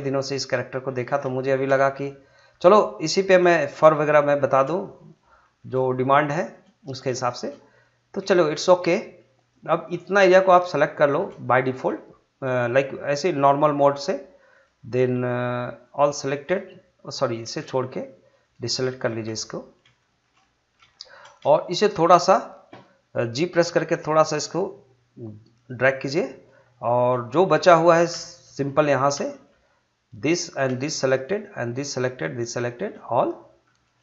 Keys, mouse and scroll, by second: 1.1 scroll down 1, 1.4 shift+middle click, 1.7 middle click, 2.5 scroll down 1, 2.7 middle click, 3.1 scroll up 1, 3.5 shift+middle click, 4.4 shift+middle click, 5.1 shift+middle click, 6.4 shift+middle click, 7.2 shift+middle click, 9.4 click, 11.4 middle click, 12.5 shift+click, 18.4 ctrl+click, 19.1 middle click, 20.9 shift+middle click, 21.5 shift+middle click, 23.3 g, 25.5 g, 25.9 middle click, 28.0 scroll up 2, 28.2 shift+middle click, 29.0 scroll up 2, 29.3 shift+middle click, 30.1 click, 31.2 shift+click, 33.2 shift+middle click.